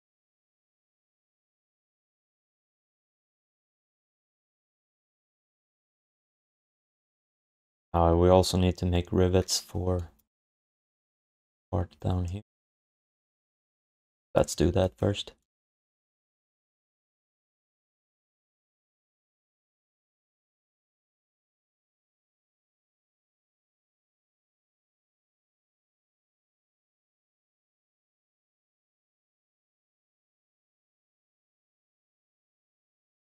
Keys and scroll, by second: 12.7 ctrl+s, 14.5 1, 19.7 3, 20.7 3, 22.8 1, 24.7 alt+shift+d, 25.0 ctrl+s.